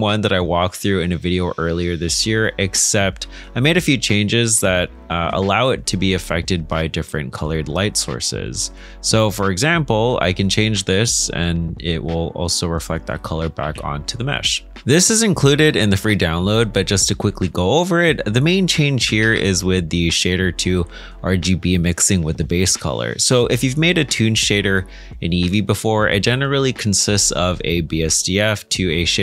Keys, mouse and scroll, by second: 1.3 middle click, 5.5-6.2 scroll down 1, 6.2 middle click, 17.7 middle click, 19.2 ctrl+space, 19.7-20.3 scroll up 1, 20.3 middle click, 20.5 scroll up 1.